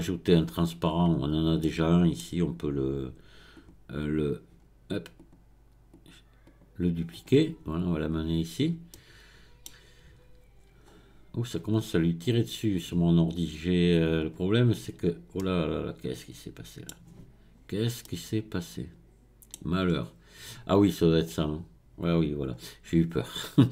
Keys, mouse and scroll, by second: 3.9 click, 4.0-5.9 right drag, 5.9 click, 6.4-8.2 right drag, 8.6-8.9 scroll up 2, 8.9-11.9 middle drag, 11.9-14.2 scroll up 4, 14.2 click, 15.4-17.5 middle drag, 17.5 scroll down 2, 18.0-19.9 middle drag, 19.9 scroll up 4, 21.3-23.7 drag.